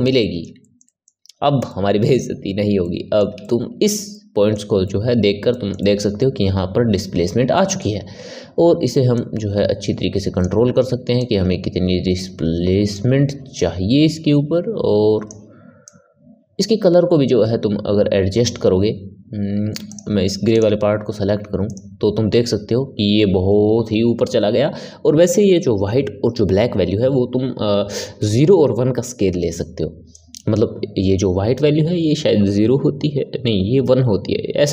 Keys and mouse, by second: 9.1-21.7 drag.